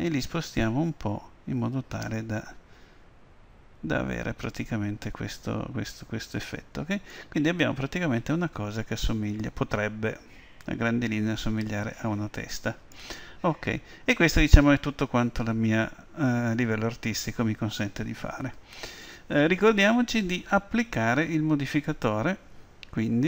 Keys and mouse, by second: 7.1-9.2 middle drag, 14.1 KP_1.